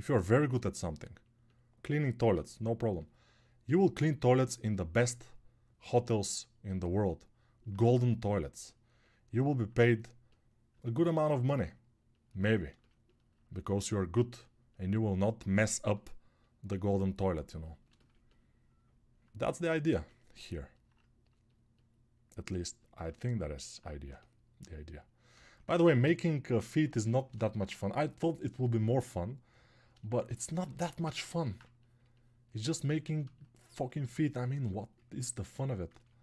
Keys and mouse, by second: 6.8 alt+right click, 31.0 ctrl+alt+1.